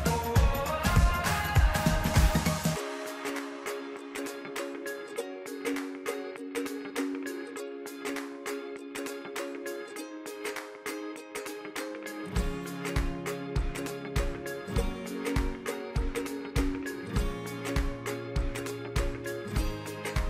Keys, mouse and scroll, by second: 10.1 e, 13.6-14.1 middle drag, 14.1-14.7 scroll up 7, 14.8-15.2 scroll down 2, 15.2-17.3 middle drag, 18.7 click.